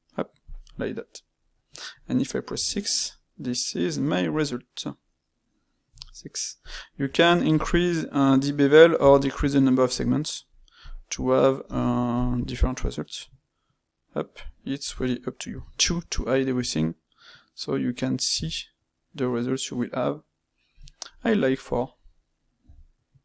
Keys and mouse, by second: 1.0-5.9 middle drag, 7.0 space, 11.6 space, 21.1-23.2 middle drag.